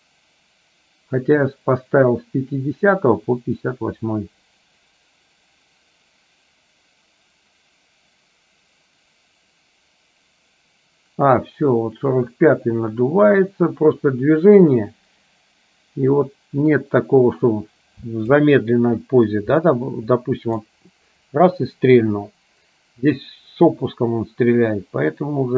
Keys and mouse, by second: 19.9 middle click, 23.9-25.5 drag.